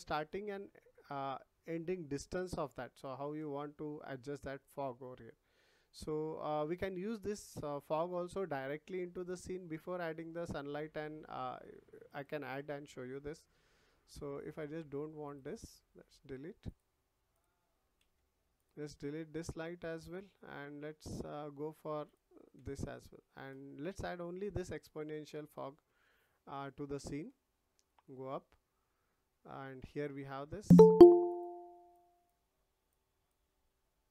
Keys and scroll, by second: 3.3 ctrl+z.